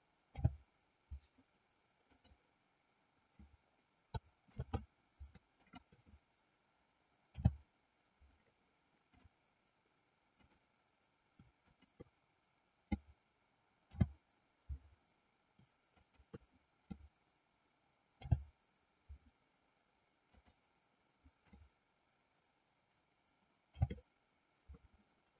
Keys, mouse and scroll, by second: 0.3 f, 2.0 click, 4.5 ctrl+z, 5.5 click, 7.3 f, 9.0 click, 10.5 click, 11.7 shift+click, 13.9 f, 15.9 shift+click, 18.1 f, 20.3 click, 23.8 shift+f.